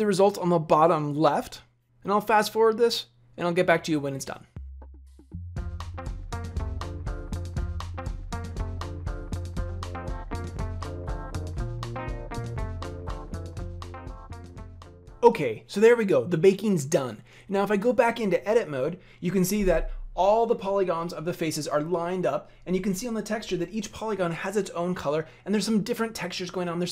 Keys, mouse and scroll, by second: 18.7 Tab.